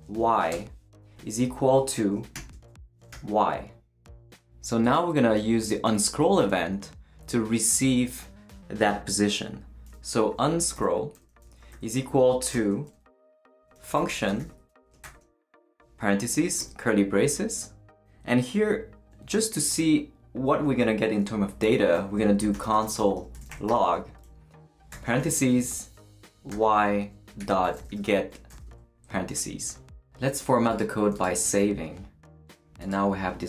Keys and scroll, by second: 0.2 Down, 0.5 Return, 1.2-3.6 typing, 4.1 shift+super+y, 10.1-15.0 typing, 11.1 Return, 16.1 shift+-, 16.3 shift+[, 16.6 shift+Return, 17.6 Return, 22.2-24.9 typing, 26.5-28.5 typing, 31.5 super+s.